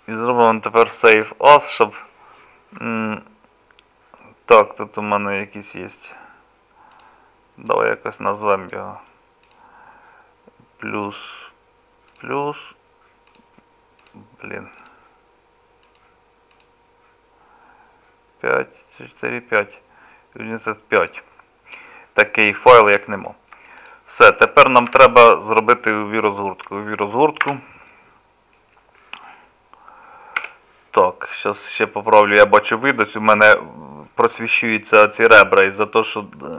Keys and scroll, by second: 24.9 KP_Divide, 27.5 Tab, 30.4 n.